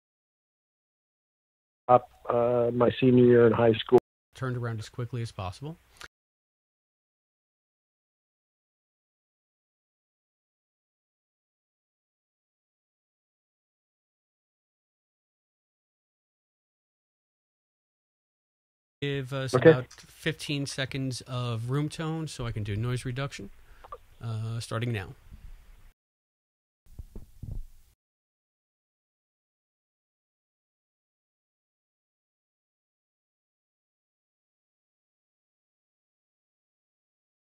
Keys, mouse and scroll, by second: 1.4 click, 1.8 space, 3.9 space, 4.1 click, 4.2 space, 6.0 space, 7.5 click, 8.8 click, 9.8-11.2 drag, 18.8 click, 18.9 space, 20.9 click, 21.1 click, 21.3 click, 21.5 click, 21.7 click, 21.9 click, 22.1 click, 22.3 click, 25.6 click, 25.8 click, 26.8 space, 27.8 space, 28.0 click, 30.0 ctrl+shift+p, 31.8 click, 32.8 click, 34.8 click.